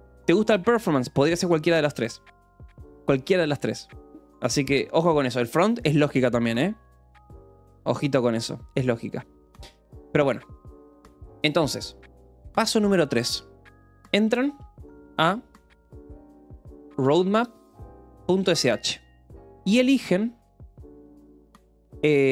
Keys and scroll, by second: 13.9-21.6 typing, 19.2 Escape.